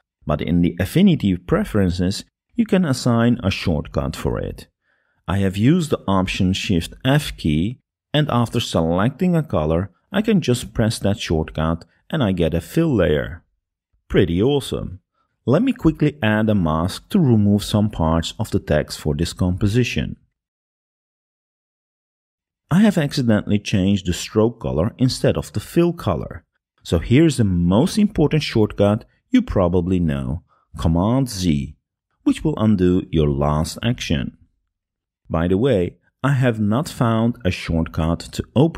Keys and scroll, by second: 7.9 Escape, 12.8 alt+shift+f, 19.2 b, 20.8 [, 22.9 super+0, 32.9 super+z.